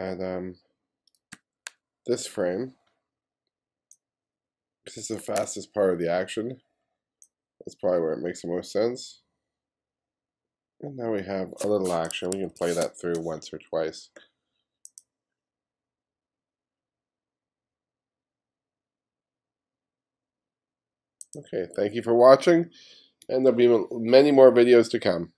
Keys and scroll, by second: 1.4 ], 5.4 ], 12.4 1, 12.8 space.